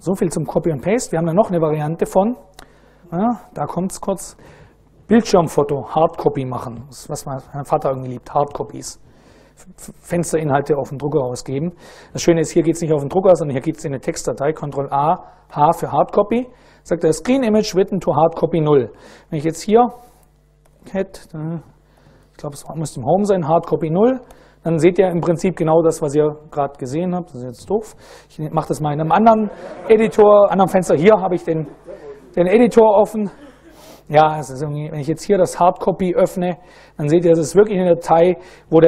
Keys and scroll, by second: 12.2 super+Right, 14.2 ctrl+a, 15.2 h, 19.0-22.4 typing, 23.9 Return, 30.0 ctrl+a, 30.5 3, 32.9 ctrl+x, 33.1 ctrl+f, 35.1-36.4 typing, 36.6 Return, 37.3 Down, 37.9 Down.